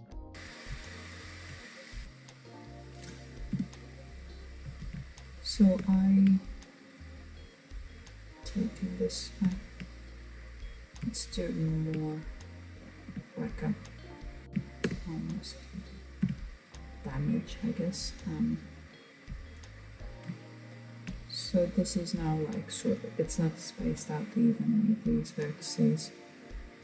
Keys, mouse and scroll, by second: 1.2-2.6 middle drag, 2.6 KP_1, 3.9 alt+z, 4.3-5.1 scroll up 2, 5.1-9.6 shift+middle drag, 9.6 click, 10.6 shift+click, 12.1 KP_1, 13.5 s, 17.6 alt+click, 18.5-19.6 scroll down 2, 19.6-22.7 shift+middle drag, 25.9-26.8 drag.